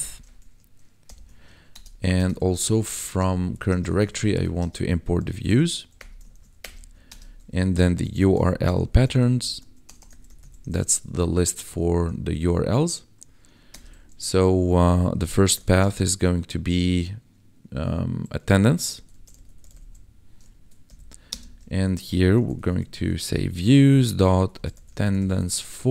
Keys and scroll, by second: 1.0 ctrl+b, 1.7 Return, 2.5-5.8 typing, 5.9 Return, 6.3 ctrl+s, 6.6 Return, 8.0-11.9 typing, 13.2 [, 13.7 Return, 15.2-16.7 typing, 18.3-25.9 typing, 20.5 Right.